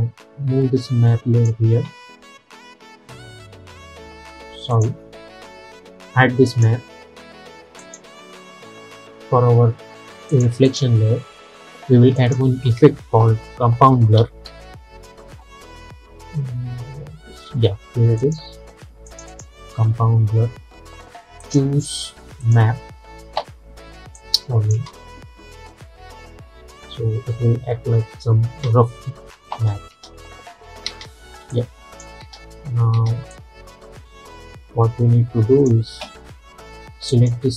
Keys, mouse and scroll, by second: 6.6 click, 10.8 click, 12.9 ctrl+a, 13.5-15.1 typing, 18.3 click, 24.8 space, 29.7 space, 31.6 click, 32.3 space, 33.4-37.5 drag.